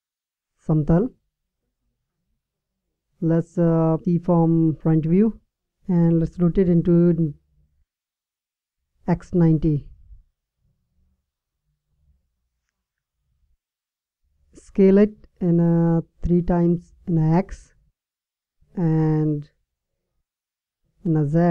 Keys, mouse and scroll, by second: 2.1 KP_1, 4.1 KP_1, 5.8 r, 13.5 s, 20.5 s.